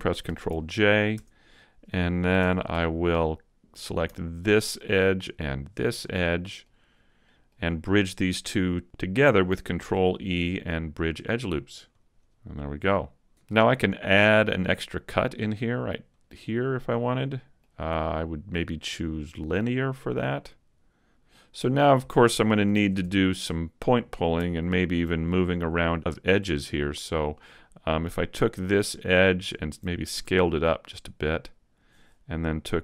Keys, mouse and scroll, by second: 0.2 ctrl+j, 1.2 Tab, 1.5 middle click, 2.4 ctrl+Tab, 4.3 alt+right click, 5.6 alt+shift+right click, 6.0 middle click, 7.2 middle click, 9.8 ctrl+e, 12.6 middle click, 16.1 click, 17.2 middle click, 18.6 click, 20.0 middle click, 22.8 ctrl+Tab, 23.4-24.5 scroll up 1, 24.5 scroll up 1, 24.8 alt+right click, 25.2 middle click, 27.0 middle click, 29.4 alt+right click, 30.1 s, 31.9 click.